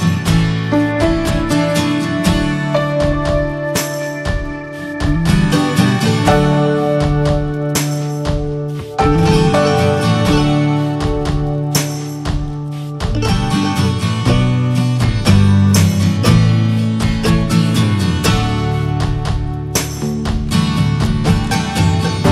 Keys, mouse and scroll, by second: 0.5 click, 0.7 scroll down 2, 0.9 middle click, 1.2 ctrl+a, 1.6 click, 2.2 ctrl+a, 2.8-3.9 middle drag, 3.9 ctrl+a, 4.4 ctrl+click, 4.7 ctrl+s, 4.9 ctrl+s, 5.0 ctrl+s, 5.4 middle click, 6.2 ctrl+a, 7.1 middle click, 7.3 scroll up 1, 7.9 ctrl+s, 8.1 drag, 8.4-9.4 shift+middle drag, 9.4 click, 9.7 Delete, 9.9 drag, 10.1 middle drag, 10.4-10.8 drag, 10.8 ctrl+a, 11.5 click, 11.8-12.7 middle drag, 12.7 ctrl+s, 13.0-13.3 middle drag, 13.3-14.4 drag, 14.4 ctrl+j, 15.3 middle click, 15.6 click, 15.8-16.8 drag, 16.8 ctrl+j, 17.4 drag, 17.6 click, 18.0-18.5 middle drag, 18.5 shift+drag, 19.0 ctrl+a, 19.8 ctrl+j, 20.5-20.9 middle drag, 20.9 drag, 21.3 drag.